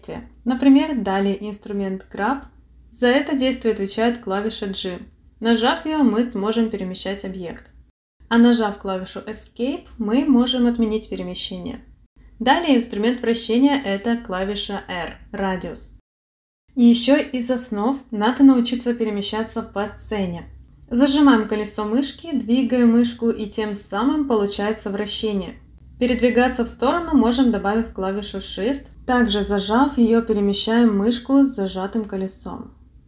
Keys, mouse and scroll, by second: 0.0 click, 0.1 click, 0.6 click, 4.4 g, 8.7 g, 14.7 r, 18.2 middle click, 25.7 middle click, 27.2 middle click, 30.0 shift+middle click.